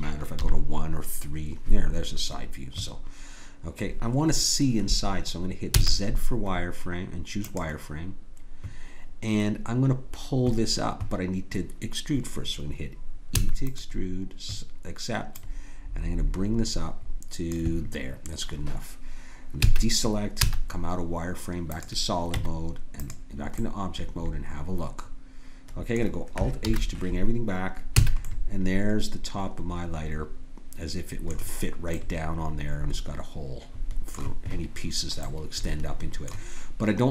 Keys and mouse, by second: 0.4 KP_3, 5.7 z, 13.4 e, 15.3-16.8 drag, 19.6 a, 20.4 z, 22.4 Tab, 26.6 alt+h, 28.0 a, 31.9-33.0 middle drag, 33.8-35.2 middle drag.